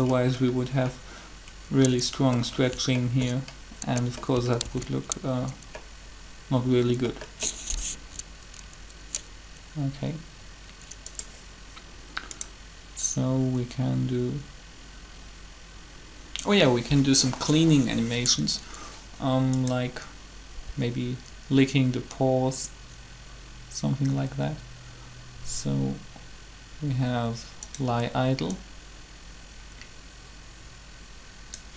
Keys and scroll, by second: 4.6 alt+shift+a.